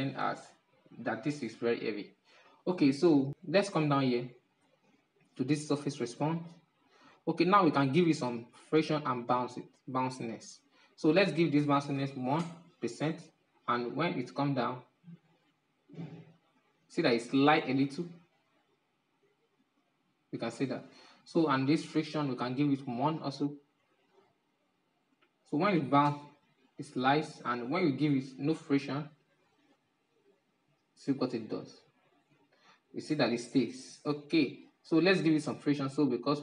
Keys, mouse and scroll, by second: 3.0-5.7 scroll down 6, 5.7-7.0 drag, 7.0-7.8 scroll down 3, 7.8-8.7 scroll up 2, 8.7-10.6 scroll down 3, 10.6-13.6 drag, 13.8-16.6 drag, 16.6-18.0 middle drag, 18.0-20.4 drag, 20.8-36.4 drag.